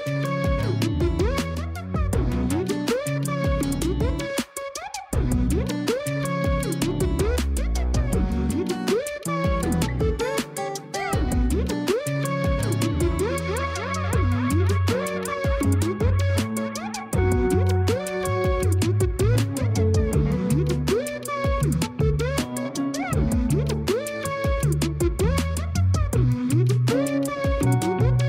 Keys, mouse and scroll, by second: 0.0-0.5 scroll down 9, 0.6 a, 0.8 a, 0.9-2.4 scroll up 4, 2.4-5.5 shift+middle drag, 7.0 click, 8.0-8.5 scroll down 9, 10.1 click, 11.3 click, 12.0 click, 14.8 ctrl+c, 18.0 click, 18.6 click, 19.5 ctrl+v, 20.1 click, 20.8-21.4 scroll up 6, 21.5 middle click, 21.9-22.4 scroll up 2, 23.0 click, 27.7-28.2 middle drag.